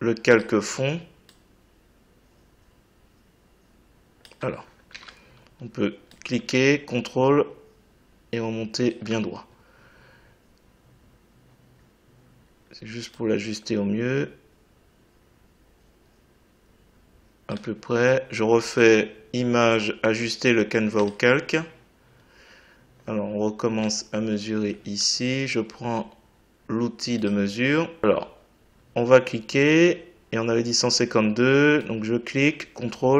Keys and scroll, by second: 4.9 ctrl+z.